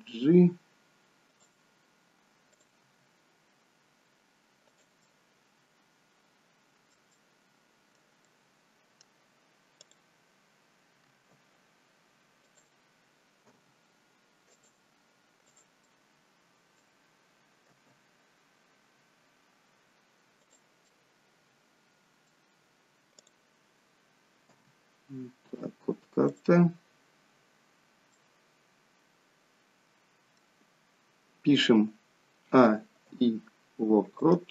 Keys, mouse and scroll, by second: 2.7 click, 3.0 g, 5.2 middle click, 7.2 middle click, 8.3 middle click, 9.9 click, 11.2 r, 13.6 g, 15.5 click, 16.0 middle click, 17.8 r, 21.0 middle click, 23.3 click, 24.7 g, 28.1 middle click, 32.6 a, 33.2 i.